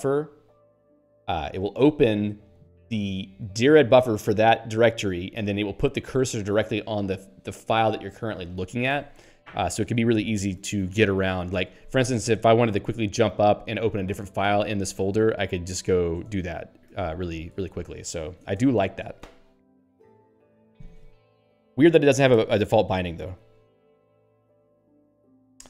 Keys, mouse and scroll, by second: 8.9 q, 14.5 super+e, 15.5 ctrl+n, 16.2 Return, 17.0 super+e, 17.6 ctrl+p, 18.6 Return.